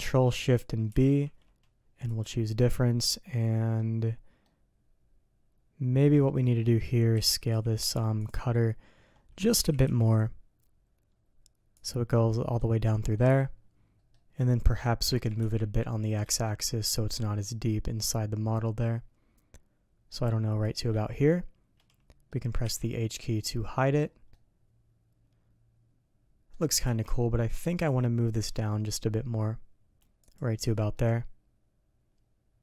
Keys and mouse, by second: 0.9 ctrl+shift+b, 2.8-3.8 drag, 4.4-6.2 middle drag, 6.6 middle drag, 7.2 s, 8.2 click, 9.6 s, 12.1-12.5 drag, 13.1 click, 13.9 click, 15.1 g, 21.1-22.3 drag, 22.6 h, 23.3-23.7 drag, 23.7 middle click, 24.3-26.5 middle drag, 26.8 ctrl+z, 27.6 g, 30.6 h, 30.9-32.6 middle drag.